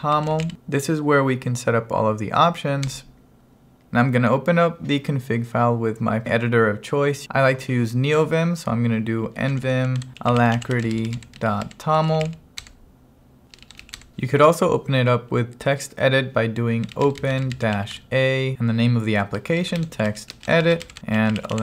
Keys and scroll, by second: 0.0-0.7 typing, 2.9 Return, 9.2-12.6 typing, 12.7 Return, 13.9 q, 14.0 Return, 16.6-18.3 typing, 19.4-21.6 typing.